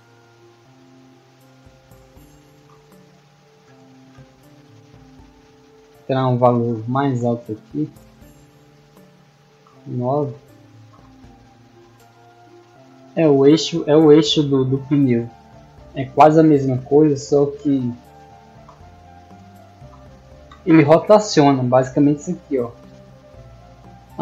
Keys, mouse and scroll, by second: 0.3 a, 1.6 d, 2.0 w, 2.9 a, 4.3-4.6 middle drag, 7.7 click, 11.8-16.4 typing, 17.6 d, 18.4 w, 19.7 d, 21.4 r.